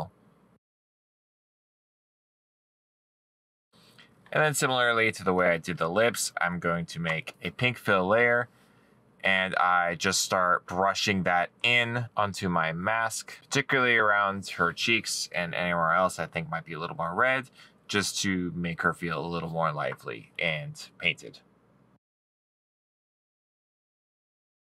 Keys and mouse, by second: 1.2 right click, 1.6 middle click, 3.6 right click, 6.4 middle click, 10.2 right click, 20.1 middle click, 20.3 right click, 22.9 middle click, 23.5 middle click.